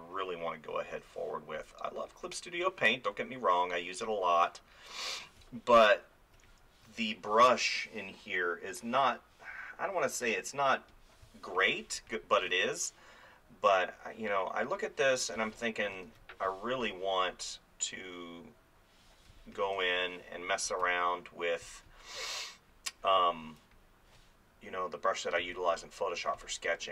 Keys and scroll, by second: 5.4 space, 11.3 space, 15.4 space, 16.1 ctrl+z, 19.3 space, 25.4 space.